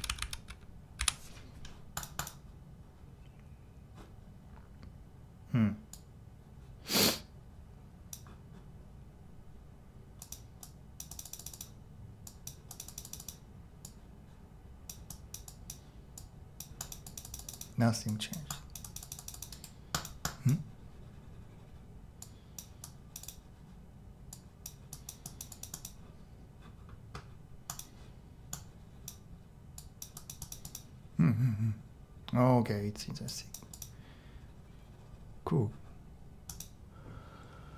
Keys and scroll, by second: 0.0-1.0 typing.